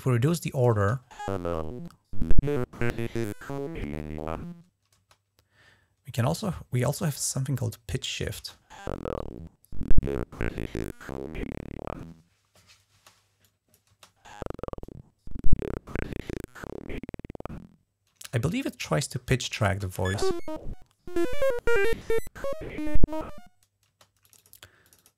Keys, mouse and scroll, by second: 0.6 space, 4.8 space, 7.0-8.1 drag, 8.2 click, 8.2 space, 12.8 space, 13.3 click, 13.7 space, 17.9 space, 18.4-19.0 drag, 19.5 space, 23.7 space, 24.1 click, 24.7 click.